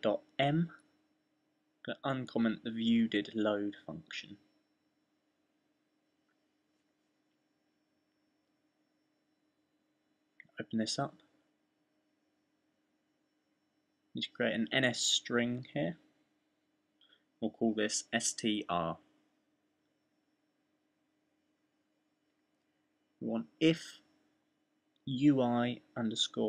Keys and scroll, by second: 5.7 fn+w, 7.6 fn+w, 12.2 fn+w, 12.5 Delete, 14.5-20.8 typing, 22.4-23.4 typing, 24.7-26.3 typing.